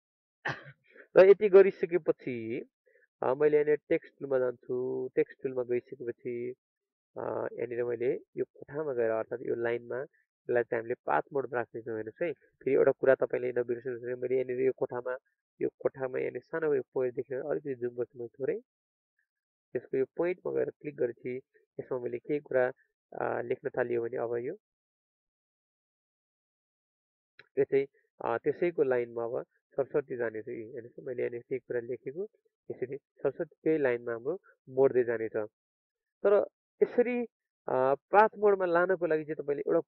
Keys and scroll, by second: 17.5 ctrl+space, 26.4 ctrl+alt+space, 34.4 ctrl+a.